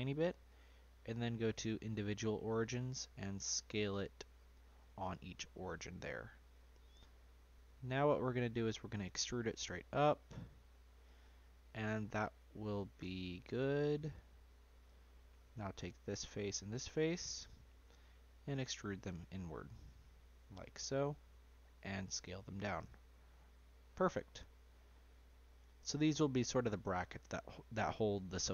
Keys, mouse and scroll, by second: 0.4-2.1 drag, 2.1-2.8 scroll down 1, 2.8-4.0 scroll up 1, 4.0 s, 6.9-8.1 middle drag, 8.1-9.0 scroll down 1, 9.0 e, 11.8-14.0 middle drag, 14.0 click, 14.4 click, 15.8 shift+click, 17.6 e, 21.3 s, 23.4-23.7 scroll down 1, 23.7-26.1 middle drag, 26.1 scroll down 1, 26.2 middle click, 27.1 click, 28.1 Tab.